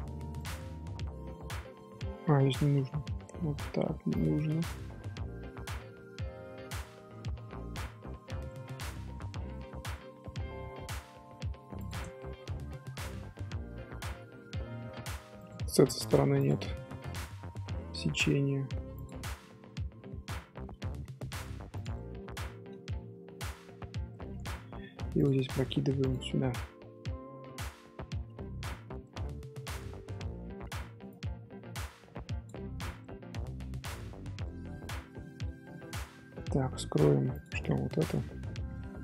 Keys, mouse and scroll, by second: 0.0 ctrl+r, 4.4-7.4 middle drag, 7.8 scroll up 2, 8.1 2, 8.4-10.8 shift+middle drag, 10.8 ctrl+r, 12.1 middle click, 13.0 z, 13.4 shift+middle click, 14.1 ctrl+z, 14.2 middle click, 14.7 ctrl+r, 16.0 ctrl+r, 16.0 right click, 16.7-18.6 middle drag, 18.6-21.9 right drag, 18.6 g, 21.9-23.4 middle drag, 23.4 right click, 23.4 z, 24.1 shift+middle click, 24.4 1, 24.5 middle click, 25.1 click, 26.0 shift+click, 27.1 j, 29.0-29.8 middle drag, 29.8 Tab, 30.0-34.1 middle drag, 34.1 Tab, 34.2 scroll down 2, 34.4 middle click, 34.8 Tab, 35.2 shift+middle click, 35.7-37.3 scroll up 1, 37.3 click, 38.0-39.0 middle drag.